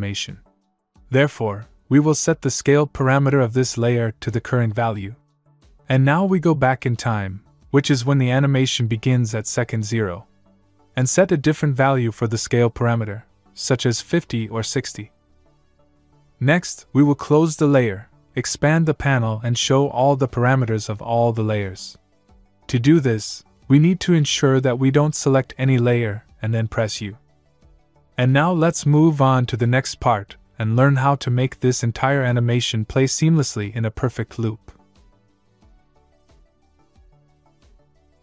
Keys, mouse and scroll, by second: 0.7 s, 6.4 click, 8.4 click, 11.1 click, 14.1 click, 16.5 click, 19.8 click, 21.3 click, 24.7 click, 27.3 u.